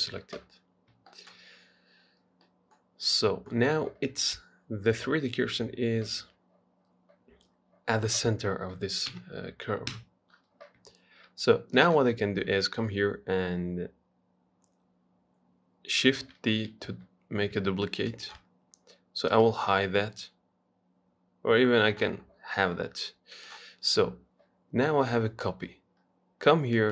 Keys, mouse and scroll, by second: 0.1-0.8 scroll up 1, 0.8 scroll up 2, 1.0-1.3 scroll down 1, 1.3 shift+middle click, 1.8 scroll down 2, 2.2 scroll up 2, 2.5 scroll down 1, 2.7-6.5 middle drag, 9.3 KP_1, 10.1 KP_3, 10.6-12.0 scroll up 1, 12.0 click, 16.4 shift+d, 19.5 click, 23.6 click.